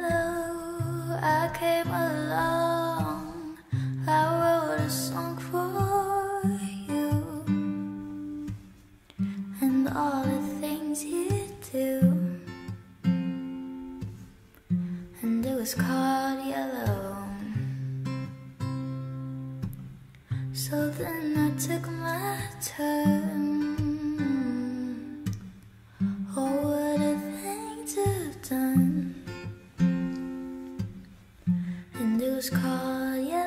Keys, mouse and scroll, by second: 12.5 s, 20.4-21.6 typing, 22.7-23.5 typing, 24.5-26.3 typing, 28.9-30.2 typing, 31.5-33.1 typing.